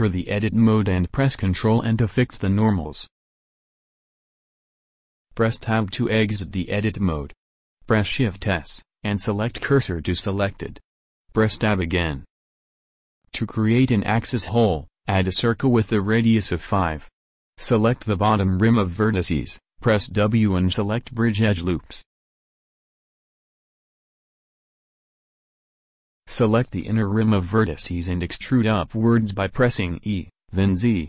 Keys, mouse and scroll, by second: 3.3 ctrl+n, 4.3-5.6 drag, 5.9 Tab, 8.3 shift+s, 12.0 Tab, 16.4 shift+a, 18.5-20.0 drag, 20.0-23.8 middle drag, 23.8 click, 24.0 w, 25.2 middle click, 25.8 a, 28.2 e.